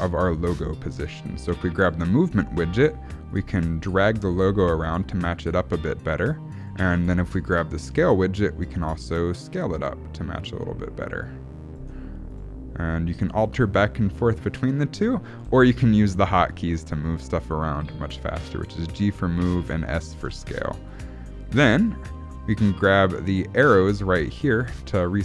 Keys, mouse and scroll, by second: 1.8 click, 3.3 click, 7.8 click, 9.3 click, 12.3 click, 13.4 click, 15.4 g, 16.8 s, 17.8 s, 20.2 g, 22.0 shift+middle click, 23.6 click, 24.6 g.